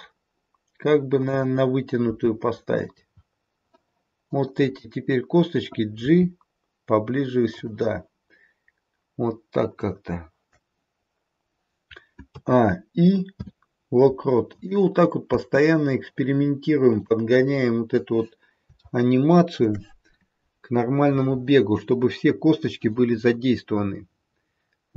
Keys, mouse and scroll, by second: 2.1 g, 4.1 click, 5.9 g, 9.8 click, 12.3 a, 13.2 i, 15.2 space, 16.9 click, 17.5-18.2 scroll down 1, 18.8 shift+middle click.